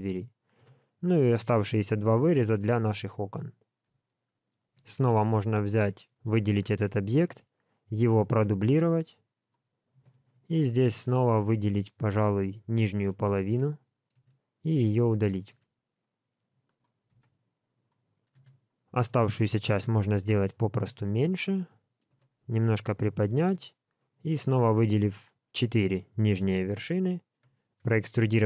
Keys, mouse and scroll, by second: 0.5 KP_1, 2.0 scroll up 2, 4.0 shift+middle click, 4.7 alt+a, 6.1 l, 8.0 shift+d, 9.7-10.1 scroll up 3, 10.1 alt+z, 10.7 shift+middle click, 13.4 alt+a, 14.1 n, 15.1 n, 15.5 b, 17.1 x, 22.0 g, 23.4 alt+a, 24.1 b, 25.4 middle click, 26.3 KP_1, 27.0 shift+middle click, 27.8 e.